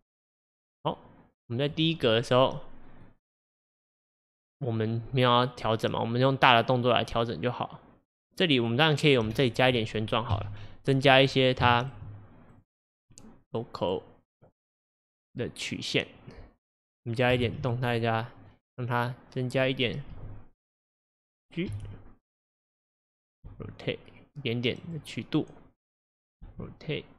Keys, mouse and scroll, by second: 3.1-6.9 drag, 9.4-10.4 shift+middle drag, 10.4 KP_1, 11.3 scroll up 2, 11.7-12.6 shift+middle drag, 12.6 drag, 13.1 click, 13.9-15.5 drag, 17.5 ctrl+z, 18.5 click, 20.2 r, 21.8 g, 23.5 r, 26.0 click, 26.5 r.